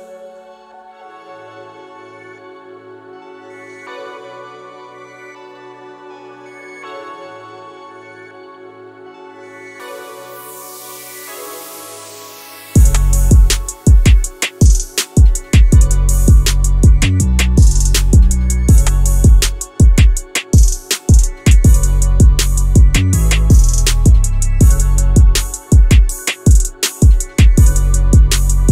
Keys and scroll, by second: 0.5 Escape, 12.6 Escape, 21.7 w, 22.4 w, 22.7 e, 23.2 w.